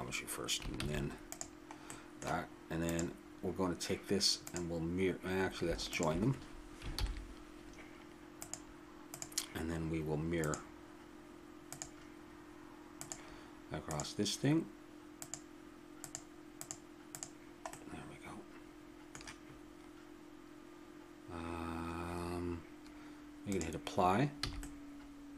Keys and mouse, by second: 0.8 shift+s, 2.9-4.0 right drag, 4.0-6.9 drag, 6.9 ctrl+j, 8.4-9.8 drag, 10.4-19.0 drag, 17.7-19.0 middle drag, 17.7-19.0 right drag, 23.5 click, 24.4 a, 24.6 click, 25.2 middle click.